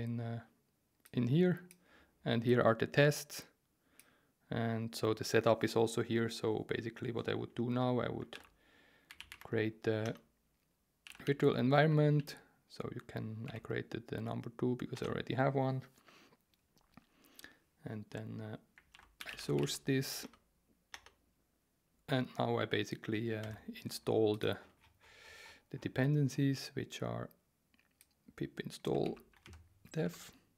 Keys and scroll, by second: 8.3 ctrl+r, 8.8-9.8 typing, 10.0 Return, 10.8-13.9 typing, 14.9 Return, 18.9 ctrl+r, 18.9-20.1 typing, 20.2 Return, 23.4 alt+2, 29.0 super+c, 29.4 alt+1, 30.0 super+v.